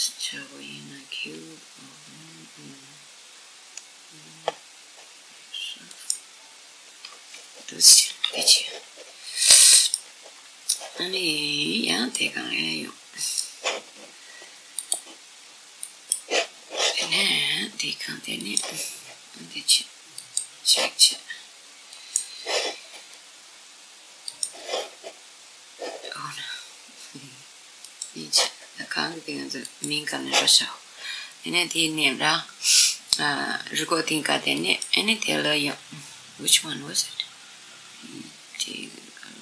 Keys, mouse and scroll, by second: 7.7 g, 10.3-11.6 middle drag, 11.6-16.2 drag, 18.0 click, 21.6 click, 23.9 click, 29.3 click, 34.3 click.